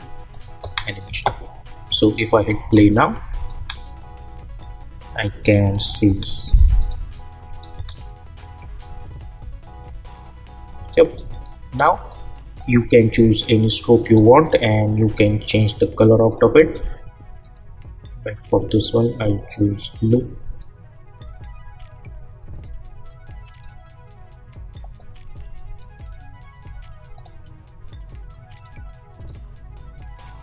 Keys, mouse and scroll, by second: 0.6 space, 2.6 space, 3.1 click, 3.5 space, 6.0 space, 6.8 click, 7.7 space, 10.7 space, 11.0-30.4 drag.